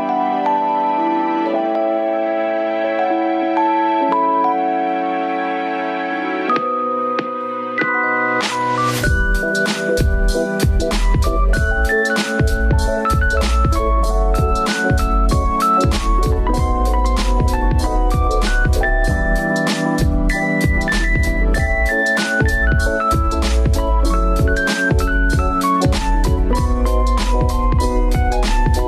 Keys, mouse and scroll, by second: 0.1 middle click, 0.9 g, 2.2-3.5 middle drag, 3.5-4.7 scroll down 3, 4.7 shift+click, 5.7 ctrl+p, 7.2 click, 7.7 click, 8.2-11.4 typing, 12.6 shift+d, 13.5-16.4 middle drag, 13.5 shift+d, 16.4 click, 16.8 g, 18.2 click, 18.5 g, 19.1 click, 19.2 g, 20.0 click, 20.2-23.2 typing, 20.8 click, 21.5 click, 22.3 click, 23.1 click, 25.0 click, 25.5 click, 26.0-27.6 middle drag, 27.6 click.